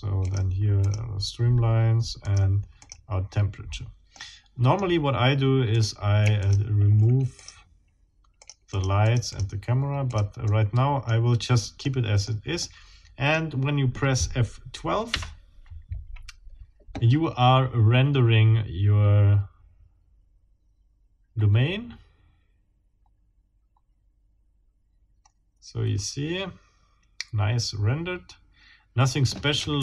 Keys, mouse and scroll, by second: 0.2 click, 0.8 click, 2.2 click, 2.8 click, 3.5-4.0 scroll down 1, 4.1 middle click, 5.7 click, 6.4 shift+click, 7.3 shift+click, 8.4 shift+click, 9.1 click, 10.1 click, 10.5 middle click, 11.8 middle click, 12.6 middle click, 15.1 F12.